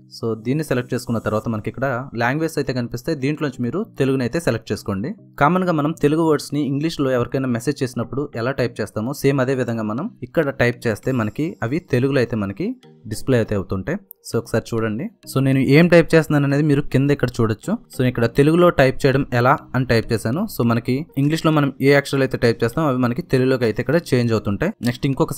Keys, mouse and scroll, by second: 2.7 click, 6.6 click, 15.5-17.8 typing, 18.8 Return, 19.2-23.6 typing, 24.7 ctrl+a, 24.8-25.3 typing.